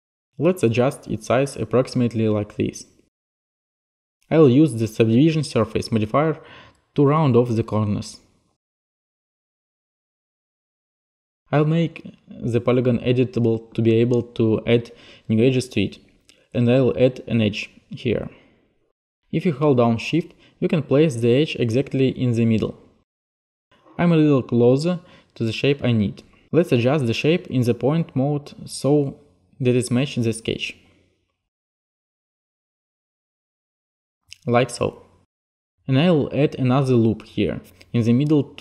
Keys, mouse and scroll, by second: 0.8 click, 1.3 t, 6.7 alt+click, 8.3 e, 8.9 click, 10.1 click, 11.4 click, 12.6 click, 16.1-16.6 typing, 19.1 shift+click, 23.4 click, 24.2 click, 27.2 middle click, 28.0 click, 29.1 shift+click, 30.5 click, 31.8 click, 32.3 t, 33.4 right click, 33.6 e, 34.9 right click, 35.3-36.2 typing, 36.6 right click, 37.4 click, 38.0 click, 38.5 shift+click.